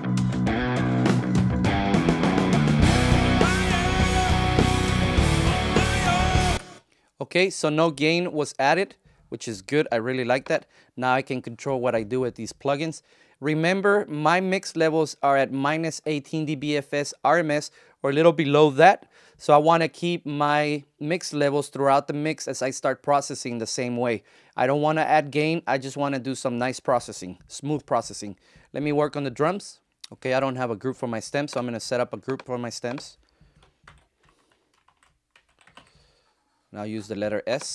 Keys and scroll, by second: 6.4 ctrl+alt+shift+space, 7.4 space, 33.7 shift+super+g, 34.6 shift+super+g, 34.7 shift+super+s, 35.0-36.1 typing.